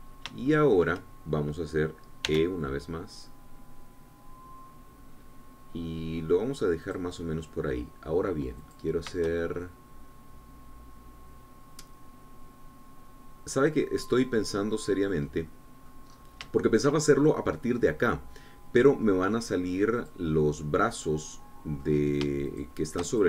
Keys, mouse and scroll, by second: 0.5 click, 1.3 shift+click, 3.1 e, 7.6 click, 8.0 click, 9.6 click, 10.2-14.8 shift+drag, 15.2-16.9 drag, 17.4-20.0 shift+drag, 20.9 click, 21.8-22.8 drag.